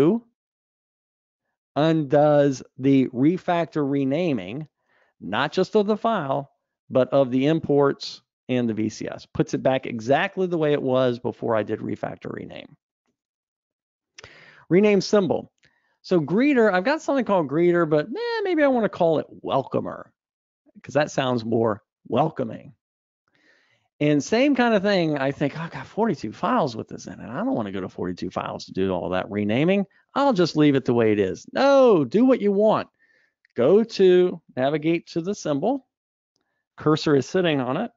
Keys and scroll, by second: 12.1 super+Up, 35.6 super+b.